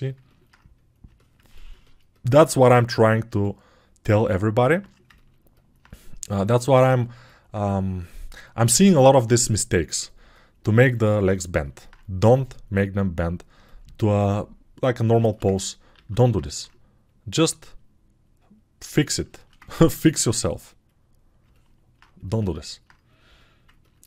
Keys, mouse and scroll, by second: 7.5-10.3 drag, 7.5-10.3 right drag, 8.8 alt+q, 16.0 alt+q.